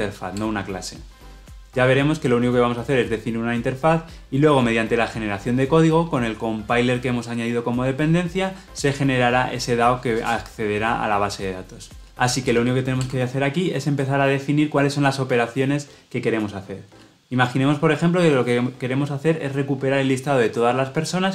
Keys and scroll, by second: 0.3 Return, 12.0 ctrl+z.